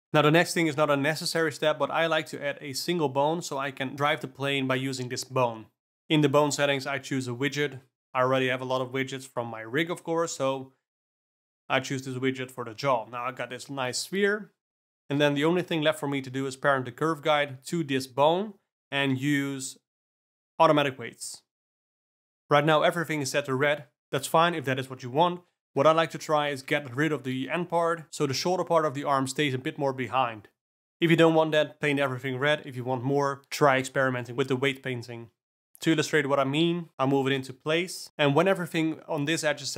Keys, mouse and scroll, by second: 0.0 shift+a, 3.5 Tab, 4.0 click, 4.5 g, 6.7 Tab, 6.8 shift+s, 8.2-9.4 alt+middle drag, 10.1 click, 11.0 click, 13.8 g, 15.5 click, 16.0 shift+click, 16.9 ctrl+p, 21.0 alt+a, 21.2 click, 21.6 Tab, 23.4-25.2 drag, 25.8 click, 27.5-30.5 drag, 30.5 q, 32.2 Tab, 33.4 click, 33.8 click, 34.2 g, 36.2 click, 37.0 Tab, 37.3 click, 37.6 g.